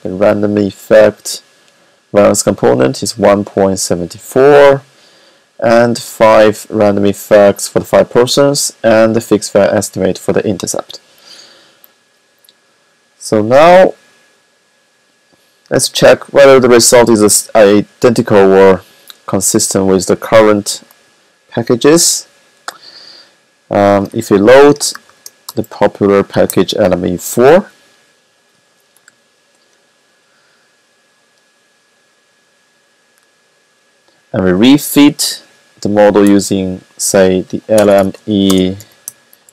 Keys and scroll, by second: 23.6-25.0 typing, 25.4 Left, 26.0-27.4 typing, 30.6-31.3 typing, 35.5-37.7 typing, 39.1-39.5 typing.